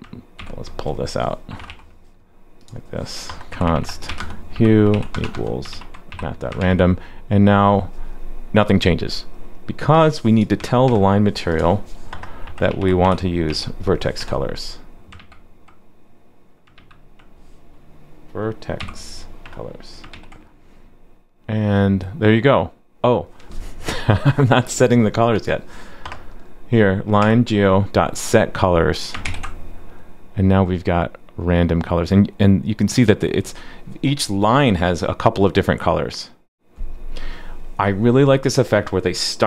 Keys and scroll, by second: 0.4 super+x, 5.7 super+v, 6.6 super+s, 15.1 super+z, 16.7 super+z, 17.3 super+z, 20.1 super+s, 29.2 super+s.